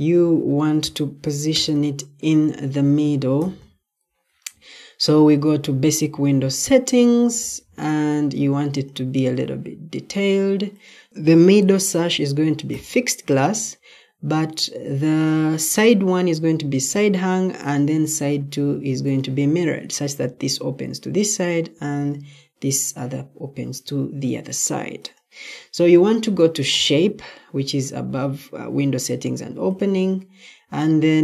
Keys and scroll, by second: 1.0-1.8 typing.